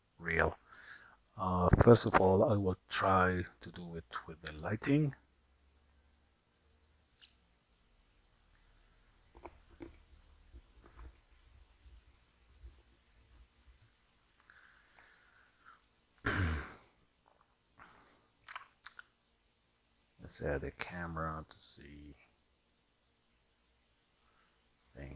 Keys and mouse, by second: 4.6 click, 7.3-9.2 drag, 11.3-15.2 drag, 18.5 n, 22.7 click, 24.2-25.1 drag.